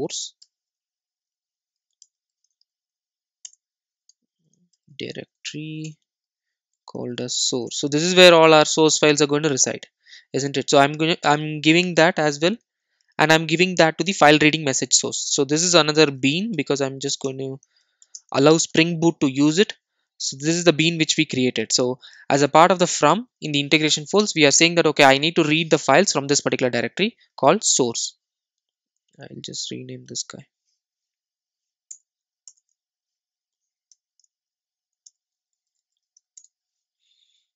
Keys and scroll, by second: 2.2 super+n, 5.8 super+n, 16.6 Return, 32.0 Delete, 33.9 Delete.